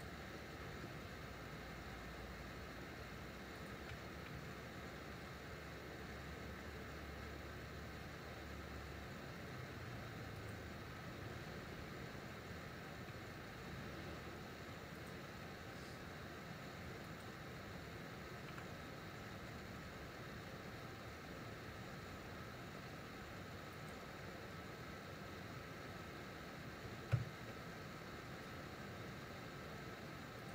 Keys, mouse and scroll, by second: 0.7 s, 4.0 e, 12.1 e, 15.5 s, 27.2 ctrl+KP_Add, 28.7 s.